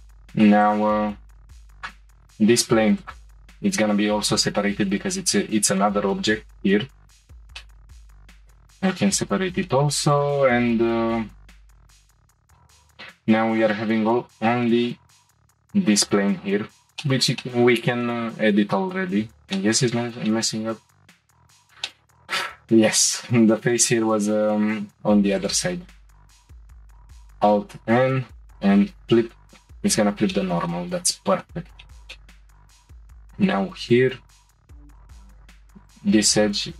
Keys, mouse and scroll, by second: 0.6 click, 3.0 click, 4.1-4.8 scroll up 2, 4.8 shift+middle click, 5.3-6.7 scroll up 6, 5.8 shift+middle click, 6.8 scroll down 2, 7.6 middle click, 8.4 p, 9.3-9.6 scroll down 1, 9.6 shift+middle click, 10.1 click, 11.3 Tab, 12.0 Tab, 12.2 click, 12.4 Tab, 13.5 click, 14.3-14.7 scroll up 3, 14.7 shift+middle click, 15.1-16.0 scroll up 1, 16.0-16.4 scroll up 2, 16.7-17.0 scroll down 1, 17.0 shift+middle click, 17.3 middle click, 17.4 middle click, 18.4-18.7 scroll down 1, 18.7 middle click, 19.4 click, 19.6-25.4 middle drag, 25.4 click, 27.6 alt+n, 30.3-31.8 shift+middle drag, 32.0 scroll up 1, 32.1-35.0 middle drag, 35.0 click, 35.1 2, 35.8 click.